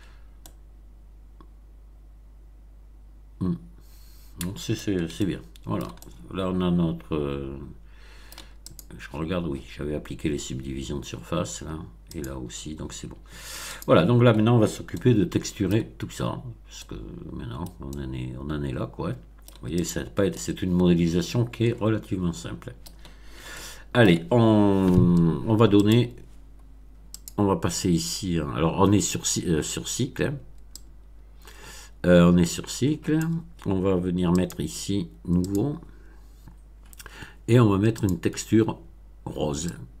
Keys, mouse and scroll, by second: 0.0-0.4 scroll up 2, 0.4-4.9 middle drag, 5.1-8.5 shift+middle drag, 8.6 click, 12.0 click, 13.6 click, 14.9-15.8 shift+middle drag, 16.2 scroll up 1, 16.7-17.8 middle drag, 17.8-19.6 middle drag, 19.8 click, 20.3-23.0 middle drag, 23.1 scroll down 1, 23.5-24.2 shift+middle drag, 25.8 click, 27.1 click, 30.7-33.4 drag, 34.3 click, 35.4 click, 37.0 scroll down 1, 38.0 click, 39.6-40.0 drag.